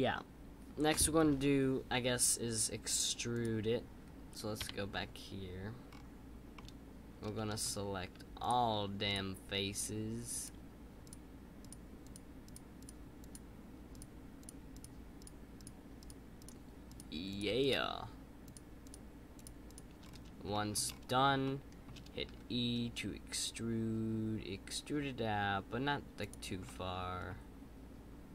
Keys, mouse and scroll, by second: 4.6 KP_5, 5.8-6.5 scroll up 5, 6.5-8.3 middle drag, 8.3-20.0 shift+drag, 20.0-20.5 scroll down 2, 20.5-20.8 shift+middle drag, 20.8-21.4 scroll up 2, 21.4-22.2 shift+middle drag, 26.6-27.6 middle drag.